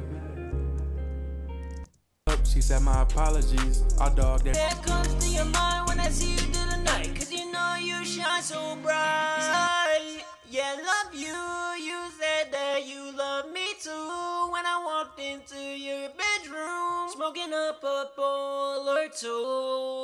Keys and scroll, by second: 0.7 ctrl+super+w, 9.9 super+`, 15.3 super+`, 16.3 super+`.